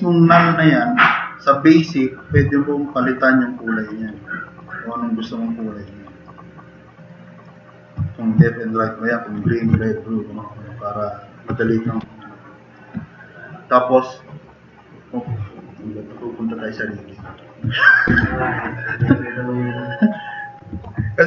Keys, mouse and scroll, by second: 11.8 drag, 12.2-12.7 drag, 19.0 t, 19.2-20.1 drag, 20.8 e, 21.1 click.